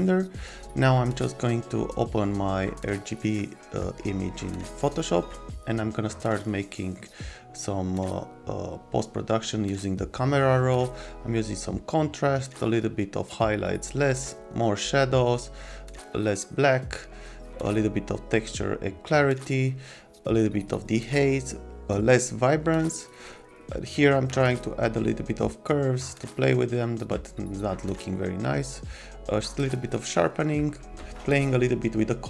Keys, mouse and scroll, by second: 2.9 click, 4.0 click, 5.8 click, 6.9 click, 9.6 click, 10.9 click, 12.3 click, 13.2 click, 14.2 click, 16.5 click, 17.4 click, 17.8 click, 18.7 click, 20.8 click, 21.7 click, 23.1 click, 24.6 click, 25.3 click, 25.8 click, 26.2 click, 28.3 click, 32.1 click.